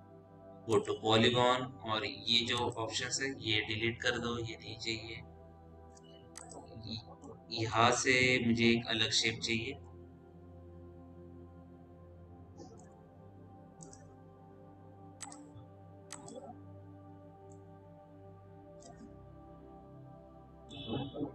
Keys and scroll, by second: 4.4 Delete, 19.4 Delete.